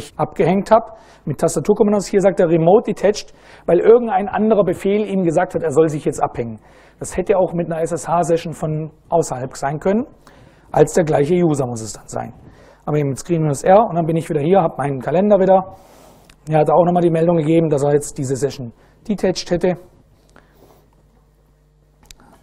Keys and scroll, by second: 12.4 Up, 13.4 Return.